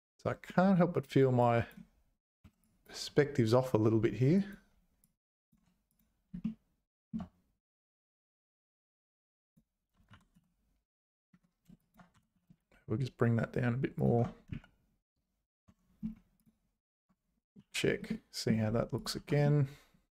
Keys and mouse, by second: 1.4 click, 2.4 1, 2.6 click, 4.3 click, 5.1 click, 5.9 click, 6.4 shift+click, 9.3 click, 10.1 g, 11.8 shift+click, 12.1 g, 14.5 z, 15.7 Tab, 16.4 click, 17.0 Tab, 17.6 h, 18.1 middle click, 19.1 h, 19.4-20.1 middle drag.